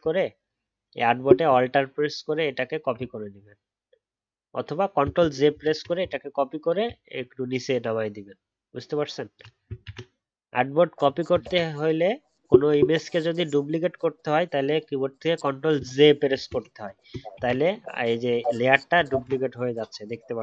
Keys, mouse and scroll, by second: 11.4 ctrl+z, 19.1 ctrl+z.